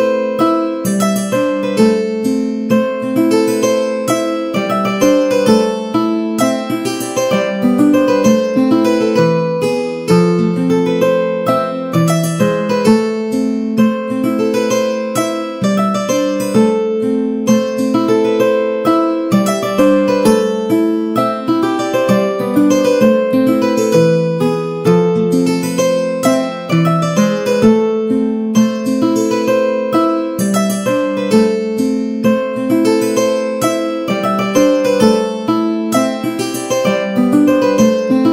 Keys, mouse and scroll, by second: 0.1 s, 2.6 a, 2.8 a, 2.9 middle click, 4.2 shift+middle click, 4.5 middle click, 6.1 s, 8.2 a, 8.4 a, 8.5 middle click, 10.0 click, 10.3 a, 11.0 ctrl+a, 11.5 a, 11.7-12.7 middle drag, 11.7 a, 14.5 middle click, 15.3 middle click, 15.8 a, 16.2 shift+middle click, 16.5 middle click, 19.3 right click, 20.0-21.6 shift+drag, 20.9 o, 23.6 shift+a, 24.6 middle click, 25.6 s, 28.5 g, 30.3 middle click, 31.4 middle click, 31.7 Tab, 32.8 3, 33.4 middle click, 33.9 shift+middle click, 34.6 g, 37.2 Tab, 37.2-38.3 middle drag.